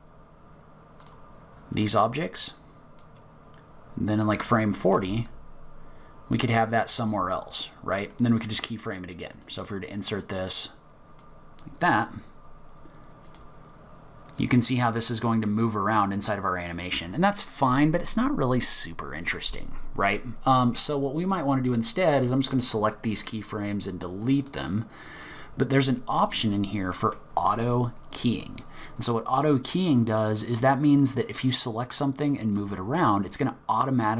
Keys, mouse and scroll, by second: 3.0-4.9 drag, 8.3-8.8 right drag, 11.2 click, 13.3 click, 15.9 click, 16.6 click, 21.0 click, 22.2 right click.